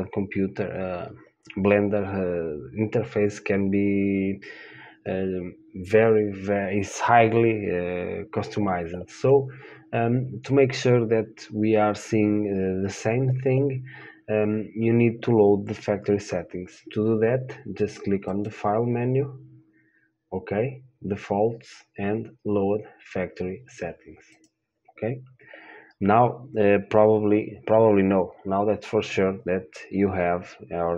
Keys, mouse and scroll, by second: 18.5-23.6 drag, 24.6-30.9 drag.